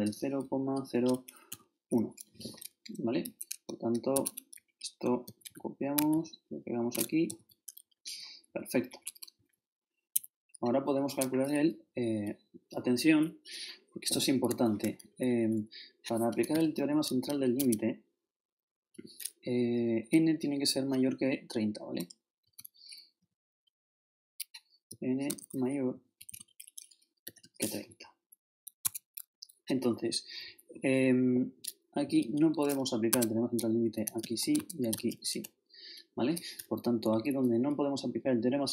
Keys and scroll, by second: 0.0-1.5 typing, 4.1 shift+Tab, 5.1 shift+super+Left, 5.2 shift+super+c, 5.5 shift+super+Right, 6.1 shift+Right, 7.0 shift+super+Right, 7.3 shift+super+v, 7.8 shift+super+Down, 8.0 shift+Left, 8.4 shift+Down, 8.9 shift+Left, 9.3 shift+Up, 10.1 shift+Home, 14.7 shift+Up, 16.8 shift+c, 17.3 shift+l, 17.6 shift+Tab, 19.9 shift+Left, 22.4 shift+space, 23.2 shift+8, 24.9-27.2 typing, 28.8 shift+Tab, 31.9-32.7 typing, 33.1 shift+Tab, 33.8-35.6 typing, 36.8 shift+Up, 37.1 shift+Right.